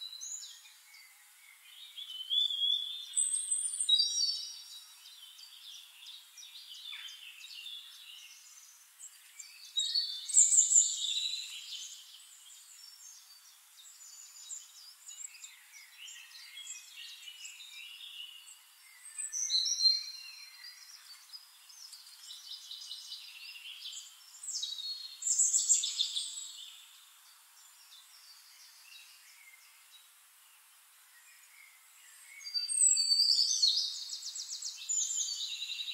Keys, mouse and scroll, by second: 1.4 click, 6.2-7.4 ctrl+drag, 11.0-14.0 ctrl+shift+drag, 14.3 ctrl+shift+click, 15.3 ctrl+middle click, 18.4 click, 19.3 click, 20.7 click, 21.9 click, 23.2 ctrl+d, 25.0 shift+click, 27.8 click, 29.5 click, 30.9 click, 32.2 click, 33.4 click, 34.2 click, 35.4 click.